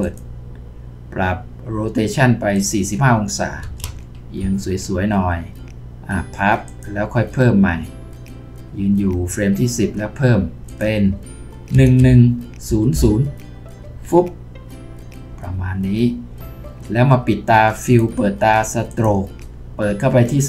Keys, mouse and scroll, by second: 3.6 typing, 4.4 Return, 11.7-12.9 typing, 13.8 Return.